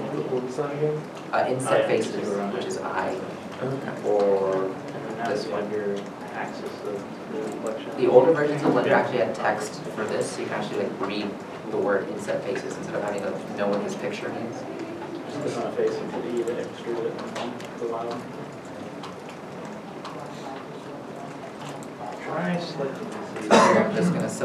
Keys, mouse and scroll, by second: 1.8 Tab, 4.1 Tab, 17.7 middle click, 21.3 scroll up 1, 22.2 shift+click.